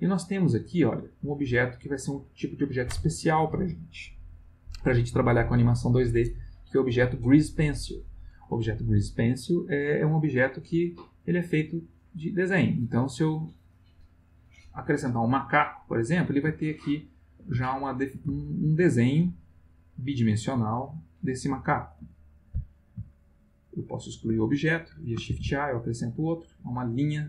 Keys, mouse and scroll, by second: 13.7 click, 14.7-15.4 middle drag, 15.5-16.5 middle drag, 16.6-17.5 ctrl+middle drag, 17.7-19.0 ctrl+shift+middle drag, 19.0-20.1 ctrl+middle drag, 20.3-21.9 middle drag, 22.0 x, 22.4 click, 23.8-24.8 ctrl+middle drag, 25.3 shift+a, 26.5 click, 27.0-27.2 middle drag.